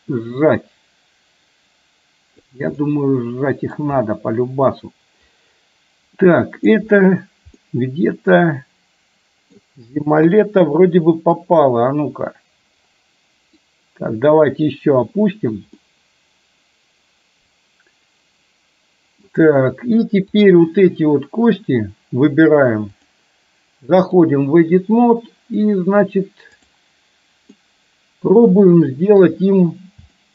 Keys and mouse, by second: 2.9-3.9 middle drag, 6.2-6.9 middle drag, 7.6-9.6 middle drag, 10.4 KP_3, 13.9 click, 15.9-19.2 middle drag, 20.4 click, 23.1-24.2 drag, 26.6 click, 27.6-28.6 middle drag, 29.2 KP_3, 30.1 shift+middle click.